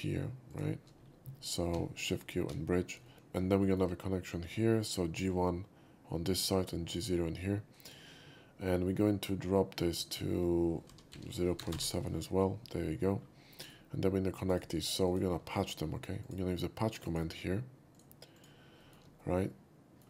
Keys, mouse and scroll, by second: 0.6 shift+click, 1.7 shift+q, 2.4 shift+q, 3.1 shift+middle click, 3.7 shift+middle click, 10.0 click, 10.7-12.1 typing, 13.6 middle click, 14.6 right click, 15.1 click, 16.3 shift+click, 17.1 shift+click, 18.4 shift+click, 18.8 shift+middle click, 19.2-20.0 shift+middle drag.